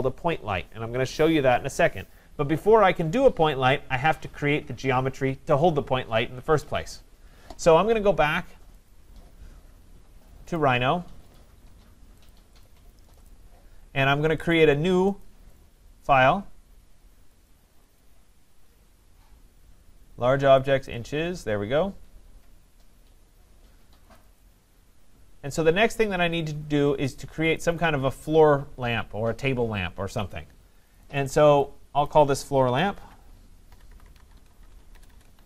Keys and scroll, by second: 34.9 BackSpace.